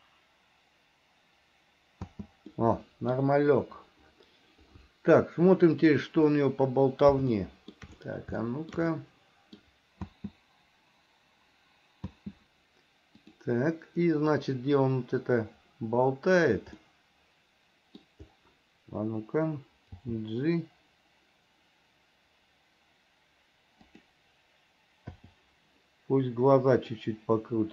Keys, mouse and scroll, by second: 2.2 space, 2.7 middle click, 6.0 click, 7.6 shift+middle click, 8.6 shift+middle click, 9.1 middle click, 10.2 space, 12.2 space, 13.4 click, 15.1-16.7 drag, 17.0-18.2 middle drag, 20.2 g, 27.2-27.7 drag.